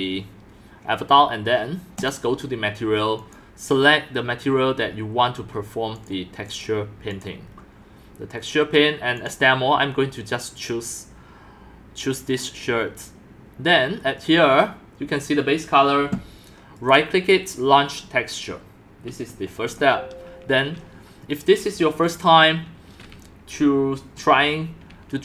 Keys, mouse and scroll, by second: 1.1-2.1 scroll down 1, 2.1-4.8 drag, 4.8 scroll down 2, 5.2-6.1 scroll up 3, 6.1-7.4 drag, 7.4-8.5 scroll down 5, 9.3 click, 16.9-19.7 right drag, 19.7-24.8 drag.